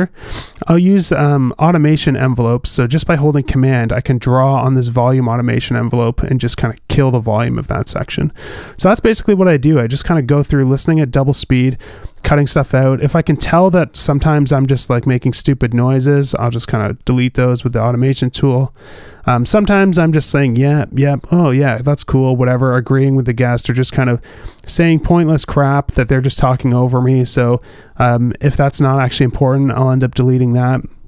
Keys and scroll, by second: 9.9 alt+b, 29.5 super+s.